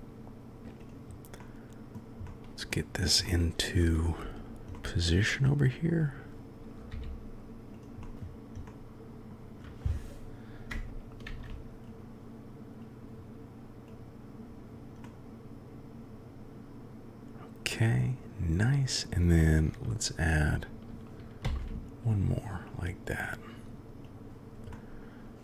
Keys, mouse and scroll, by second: 0.8 click, 1.3-1.9 drag, 2.2-2.6 drag, 3.2 click, 3.3-3.7 middle drag, 3.7 click, 4.7-5.8 drag, 6.9 g, 8.1 KP_1, 8.7-9.3 drag, 11.2 ctrl+a, 12.9-13.9 drag, 15.0-17.9 drag, 21.4 shift+d, 24.0 click, 24.7 click, 24.9-25.4 middle drag.